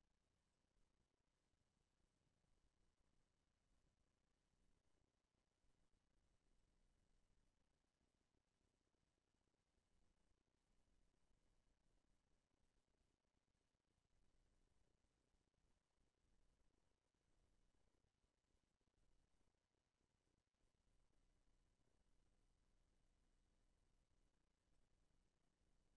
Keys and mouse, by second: 0.7-2.9 middle drag, 1.2-5.5 drag, 5.5-9.8 middle drag, 10.2-14.2 middle drag.